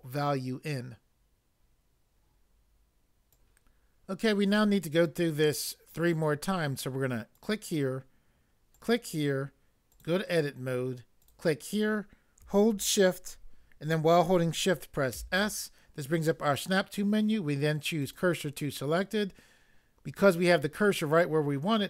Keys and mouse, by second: 3.3 click, 3.3 click, 7.3 click, 8.7 click, 9.9 click, 11.2 click, 15.1 s, 18.1 click.